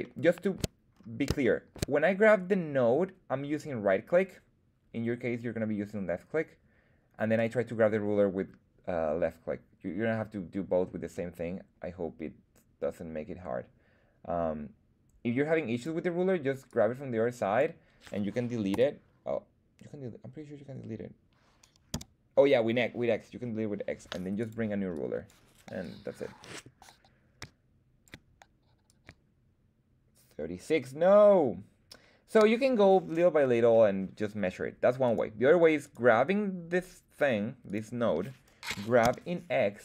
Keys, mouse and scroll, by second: 0.0 shift+middle click, 0.9-1.3 scroll up 2, 1.4 shift+middle click, 7.3-15.8 drag, 16.6 click, 18.7 BackSpace, 21.9 x, 24.4 click, 24.9 click, 25.8-28.0 drag, 28.8-32.6 drag, 31.8 l, 35.0 right click, 35.8 right click, 37.6 right click, 38.7 g, 39.0 x.